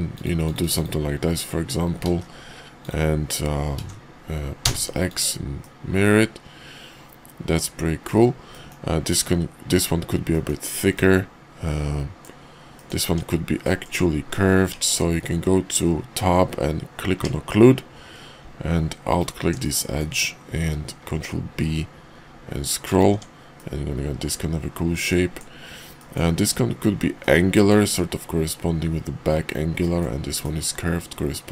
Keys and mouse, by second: 2.0 alt+x, 3.7 alt+x, 5.1 click, 5.6-8.1 drag, 8.5 click, 10.3 click, 10.9 click, 10.9-12.2 middle drag, 12.6 click, 13.1 Tab, 13.6 middle click, 14.7 Tab, 19.0 alt+click, 19.5 middle click, 20.7 ctrl+b, 23.1 Tab, 23.5-25.4 middle drag, 25.9 middle drag, 27.2 middle click, 29.8 middle click, 30.4 middle click, 31.3 middle click.